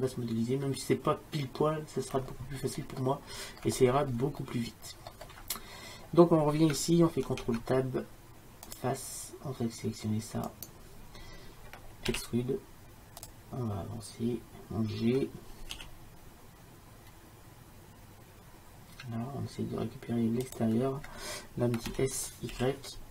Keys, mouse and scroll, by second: 2.7-7.2 middle drag, 7.3 ctrl+Tab, 12.2 e, 15.8 g, 22.0 s.